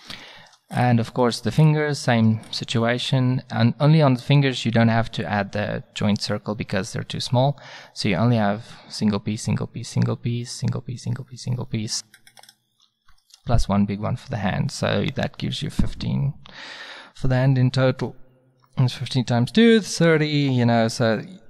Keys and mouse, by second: 7.1-12.4 middle drag, 12.5 click, 13.4-15.0 drag.